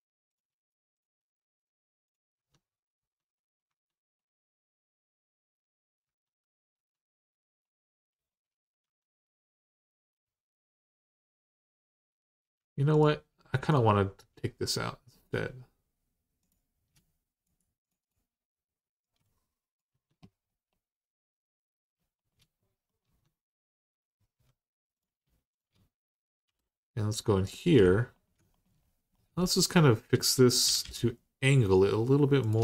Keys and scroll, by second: 2.1 Tab, 2.8 Tab, 3.5 Tab, 5.8 Tab, 6.6 Tab, 8.6 Tab, 19.7 Tab, 22.8 Tab, 24.2 1, 26.2 j, 30.4 typing, 32.5 Tab.